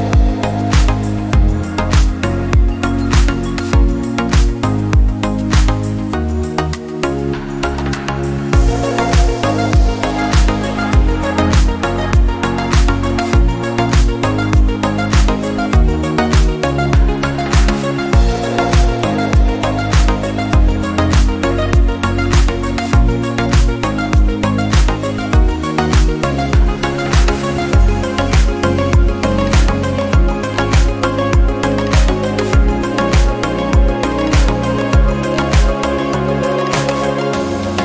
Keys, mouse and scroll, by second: 1.4 click, 1.9 click, 2.6 KP_1, 4.0 r, 6.0 r, 9.1 scroll down 2, 9.6 click, 9.9 scroll down 1, 10.8-11.1 scroll up 1, 11.1-11.7 middle drag, 11.7 scroll up 2, 12.4-14.2 shift+middle drag, 14.2 shift+a, 24.0-26.2 middle drag, 26.7 KP_3, 27.6 KP_1, 28.9 drag, 29.3 click, 29.6 r, 32.3-33.5 middle drag, 33.5 drag, 34.0 click, 34.8-35.2 drag, 36.4-36.9 middle drag, 36.9-37.6 scroll down 1, 37.6 shift+middle click.